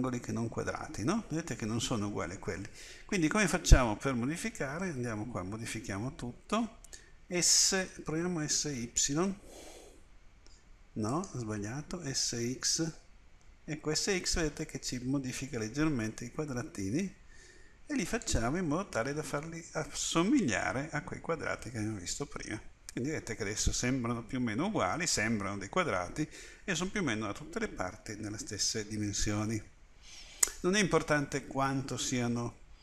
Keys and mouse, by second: 4.8 a, 7.3 s, 12.1 s.